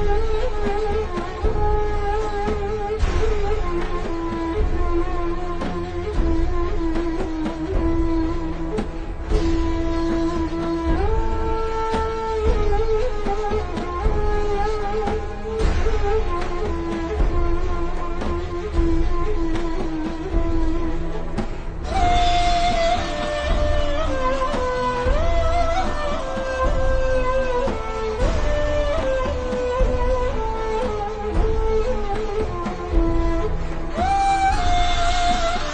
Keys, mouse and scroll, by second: 4.1 click, 10.4 v, 10.5 click, 11.6 alt+shift+scroll up 1, 12.6-13.0 alt+shift+scroll down 2, 14.8 alt+shift+scroll up 1, 15.9 click, 16.6 alt+shift+scroll down 3, 16.9-17.5 scroll up 1, 18.4-19.0 scroll down 1, 19.1 click, 21.8 alt+shift+scroll up 1, 22.2 click, 24.3-24.7 alt+shift+scroll up 2, 24.7 click, 32.7 click, 33.5-34.1 scroll up 3, 34.3-34.8 scroll down 1, 34.8 click.